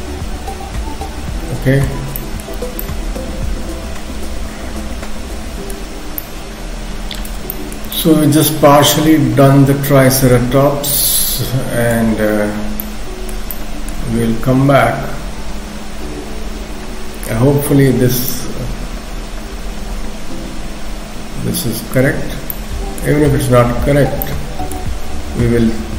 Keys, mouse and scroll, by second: 2.2 shift+middle click, 2.8 middle click, 5.9-6.2 scroll up 2, 6.2 middle click, 7.5 shift+middle click, 7.9 middle click, 12.1-12.8 scroll up 2, 12.8 middle click, 18.3 middle click, 22.5 middle click, 24.3 shift+middle click.